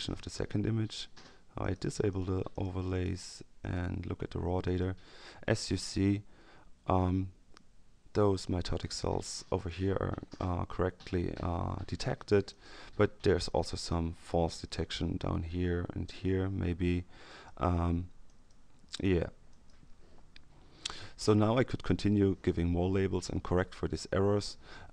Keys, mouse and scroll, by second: 1.5-3.5 drag, 3.6 click, 4.6 click, 5.5 click, 9.5 click, 12.5 click, 13.7 click, 17.2 click, 18.2 click, 19.4 click.